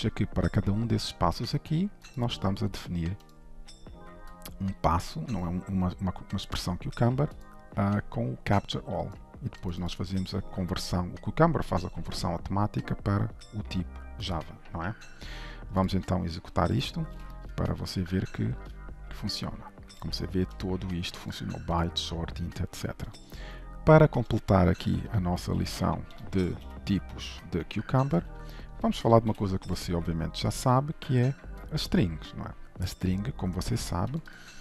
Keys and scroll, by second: 2.3 ctrl+b, 16.8 alt+shift+F10, 26.7 ctrl+/, 27.2 ctrl+s, 29.4 ctrl+shift+F12.